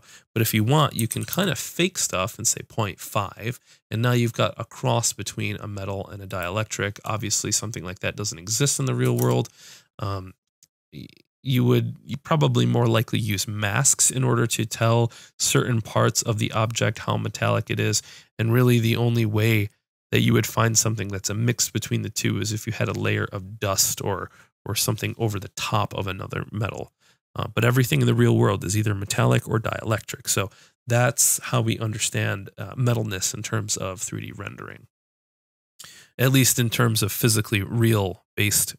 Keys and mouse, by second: 1.2-9.2 drag.